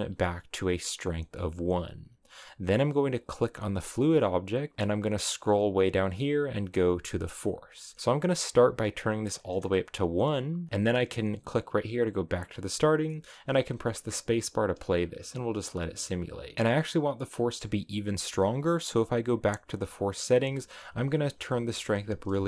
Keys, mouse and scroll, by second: 3.2 right click, 4.8-5.7 scroll down 2, 5.7-10.9 drag, 12.2 click, 13.0 middle click, 13.5 space, 16.5 click, 16.8 scroll down 2, 17.3-20.7 middle drag, 20.7-22.4 drag.